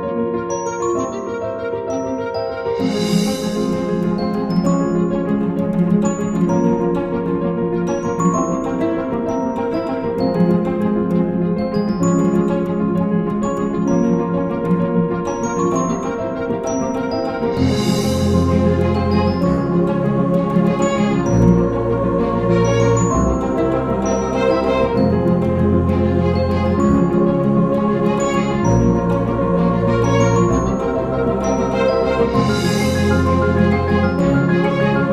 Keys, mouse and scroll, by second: 9.4 alt+scroll up 2, 9.6 alt+scroll down 2, 9.9 ctrl+scroll up 1, 11.0 double click, 13.9 ctrl+scroll down 1, 16.8 ctrl+scroll down 4, 17.6 double click, 18.1 ctrl+scroll down 1, 18.8 ctrl+scroll down 1, 18.9 double click, 19.1 ctrl+scroll up 1, 19.9 ctrl+scroll down 1, 20.0 ctrl+scroll up 1, 20.5 ctrl+right click, 21.0 alt+right click, 24.0 ctrl+scroll up 1, 24.6 alt+scroll up 1, 29.1 ctrl+scroll up 1, 32.5-33.1 ctrl+scroll down 5, 33.1-33.4 ctrl+scroll up 1, 33.5 alt+scroll down 1, 33.8-34.7 alt+scroll up 1.